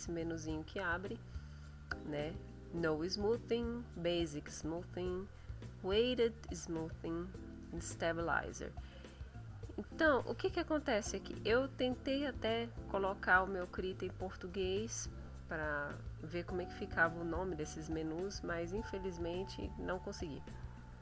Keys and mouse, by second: 11.7 click.